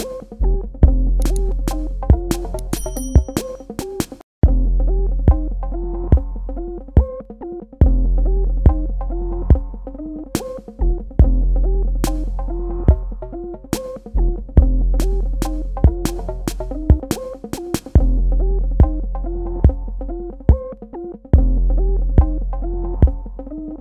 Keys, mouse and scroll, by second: 3.8 click, 8.9 i, 9.2 click, 12.3 v.